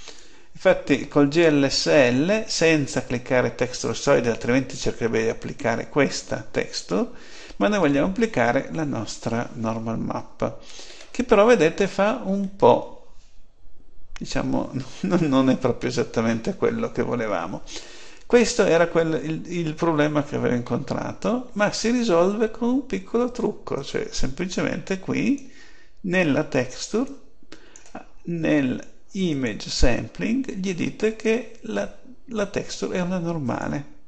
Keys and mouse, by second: 10.7-14.2 middle drag, 20.5-23.1 middle drag, 23.6-31.1 drag, 33.3-34.0 drag.